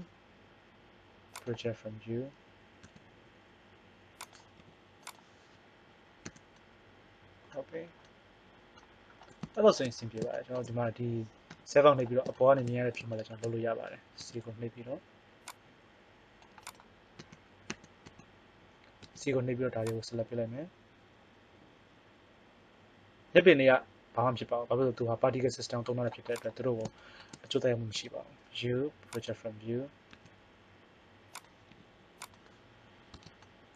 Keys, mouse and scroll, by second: 2.9 s, 4.6 g, 6.2 a, 11.5 KP_7, 14.1 c, 17.1 a, 17.7 a, 18.0 a, 19.1 c, 27.9 u, 30.1 s, 31.8 g, 33.1 Tab.